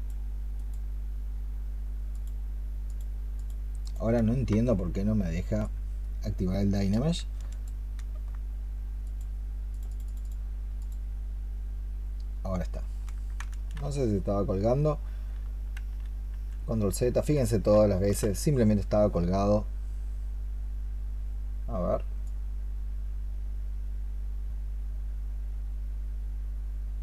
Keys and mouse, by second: 3.7 double click, 7.4 ctrl+click, 9.7 double click, 9.9 double click, 18.2 ctrl+z.